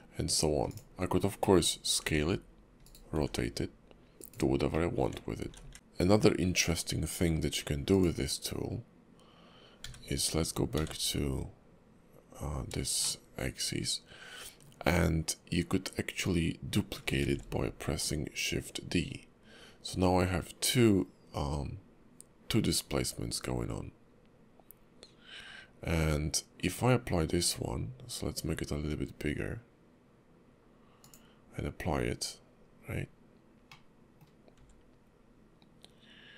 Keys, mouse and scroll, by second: 1.1-1.4 scroll down 1, 1.4 middle click, 1.7 scroll down 1, 2.0 s, 3.1 r, 4.7 middle click, 5.7 ctrl+z, 5.7 scroll down 1, 5.7 q, 13.8 shift+middle click, 33.7 middle click, 34.5 s.